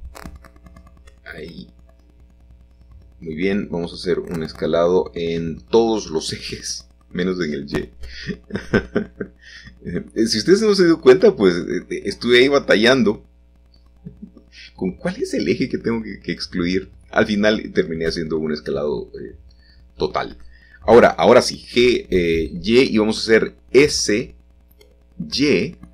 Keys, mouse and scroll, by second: 2.1 s, 3.3 shift+x, 4.3 Escape, 5.8 s, 8.0-9.1 drag, 10.0 s, 11.3 click, 12.2 g, 16.0-17.6 drag, 17.6 middle click, 18.0-19.0 scroll up 1, 19.0 shift+middle click, 19.9 middle click, 20.7 g, 20.9 y, 21.8 click, 22.5 s, 22.8 z, 23.6 Escape, 24.3 s, 24.7 y.